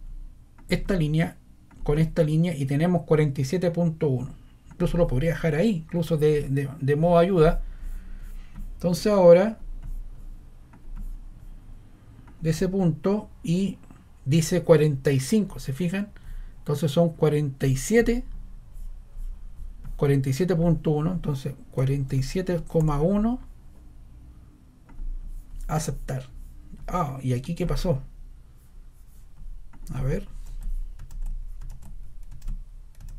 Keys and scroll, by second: 7.7 scroll, 21.5-23.3 typing, 30.4 super+z, 31.1 super+z, 31.7 super+z.